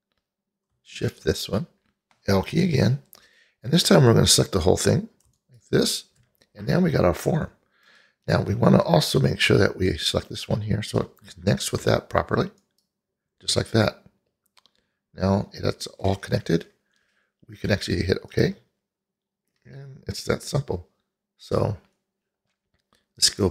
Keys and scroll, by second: 2.7 l.